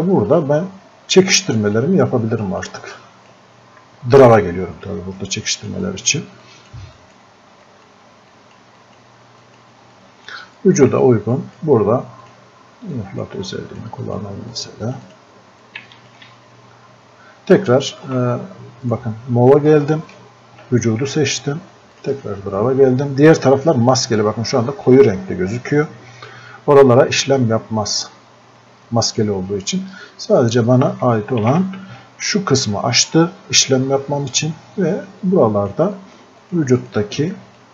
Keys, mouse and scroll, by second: 1.1 right click, 1.8-18.9 drag, 22.0 click, 24.9-31.5 drag, 31.5 ctrl+z, 34.4-37.7 drag.